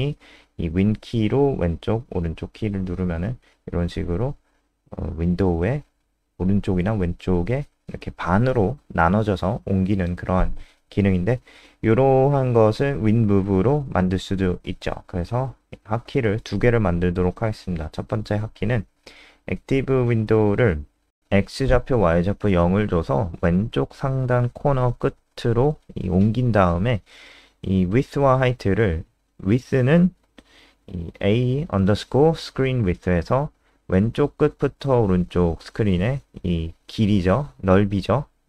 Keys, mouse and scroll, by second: 0.7 super+Left, 1.3 super+Right, 2.0 super+Left, 2.4 super+Up, 10.4-15.9 typing, 20.1-21.6 typing, 28.1 shift+a, 35.1 d, 35.3 BackSpace, 35.7 shift+-.